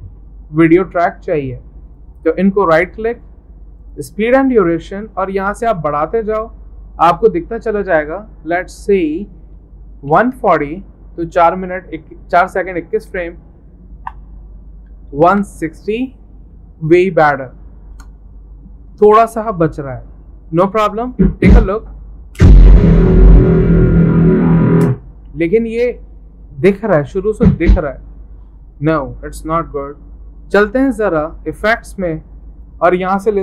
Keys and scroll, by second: 9.9-10.9 typing, 13.1 shift+Tab, 14.1 Tab, 14.9-15.9 typing, 17.9 Return.